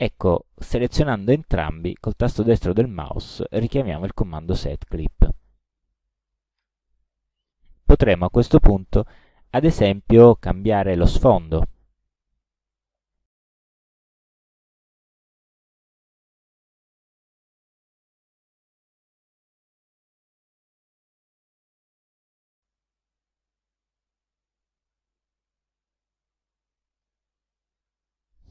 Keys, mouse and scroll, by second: 2.1 right click, 5.3 click, 6.3 middle click, 8.5 click, 9.6-12.1 drag, 12.8 middle click, 14.3 middle click, 18.2 click, 19.8 click, 22.6 click, 26.5 click.